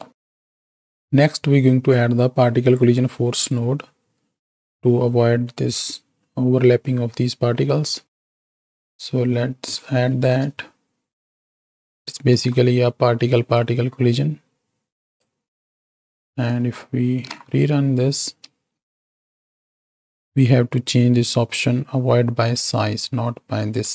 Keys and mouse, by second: 8.0 middle click, 8.7 click, 9.5 click, 10.1 shift+d, 12.3 alt+p, 13.4 click, 14.0-15.3 drag, 15.7 click, 17.0 shift+Right, 17.2 shift+Left, 18.4 space, 20.2 space, 22.5 click.